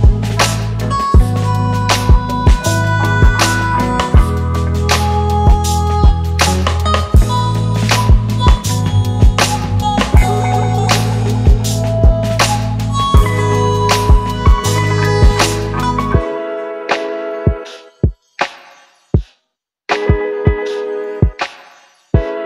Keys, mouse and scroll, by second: 13.1-13.9 alt+scroll up 1, 16.0-19.0 scroll up 1.